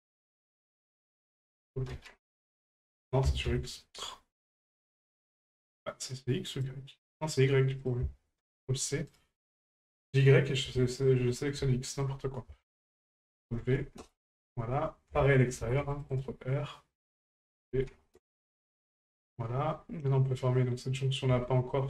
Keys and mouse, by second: 0.2 alt+shift+right click, 1.4-2.5 drag, 6.5 right click, 7.9-9.3 ctrl+drag, 9.8 right click, 10.7 shift+middle click, 11.9 shift+middle click, 12.8-14.1 ctrl+drag, 17.2-18.2 drag, 20.3 right click, 21.4 shift+middle drag.